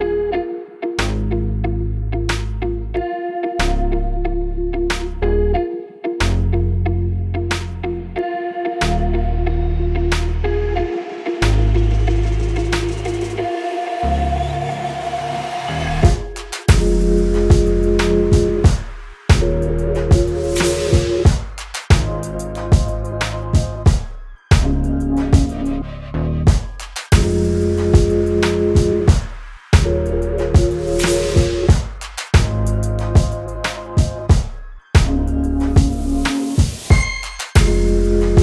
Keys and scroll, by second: 37.0 ctrl+8.